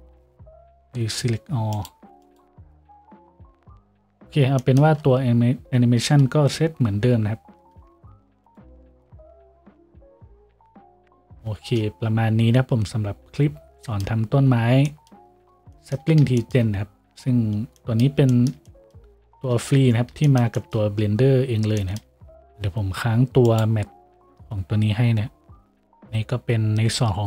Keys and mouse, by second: 2.7 F6, 4.4-22.4 middle drag, 4.4 a, 9.5 s, 10.7 a, 12.0 shift+z, 19.8 ctrl+s, 22.4-27.2 drag, 22.4 a.